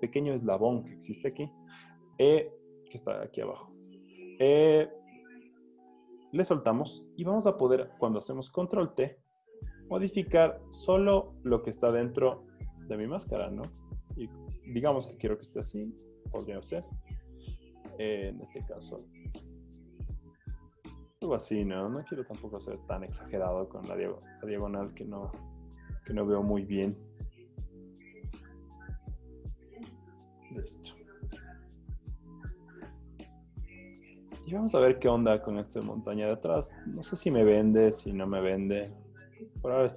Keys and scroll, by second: 8.6 super+t, 13.7 Return, 16.7 super+z, 18.2 super+t, 26.0 Return, 27.9 v, 30.3 z, 32.6 z, 33.5 z, 38.0 v, 39.6 super+z.